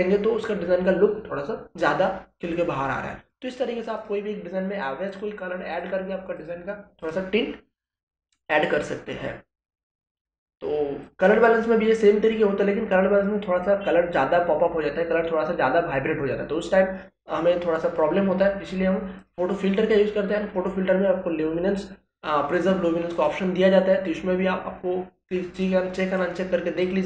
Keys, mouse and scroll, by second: 3.2 click, 10.1 click, 19.2 click, 23.1 click, 25.5-27.0 drag.